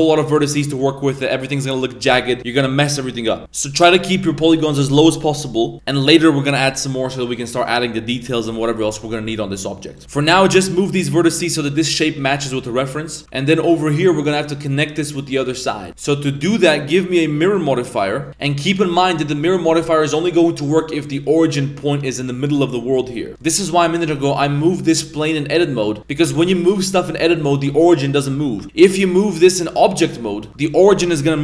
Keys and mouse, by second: 0.2 right click, 0.7 right click, 1.3 right click, 10.0 z, 10.5 g, 12.2 right click, 15.9 Tab, 16.4-17.6 drag, 22.5 middle click, 23.1 middle click, 23.4 middle click, 24.2 g, 26.2 g, 28.6 Tab, 28.9 g.